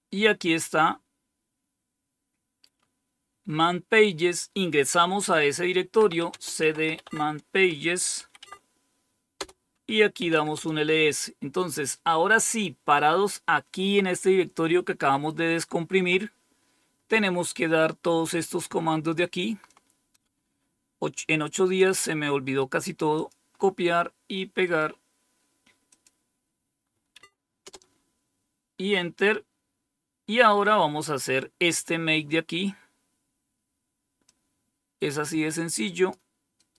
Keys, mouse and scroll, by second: 3.5 click, 5.8-8.0 typing, 8.3 Tab, 9.2 Return, 9.8-10.9 typing, 19.6-21.7 drag, 22.5 right click, 23.1 click, 25.8 click, 27.0 Tab, 27.5 Return, 32.3-33.2 scroll down 2, 33.2 scroll down 1, 34.1-36.0 drag, 36.4 right click.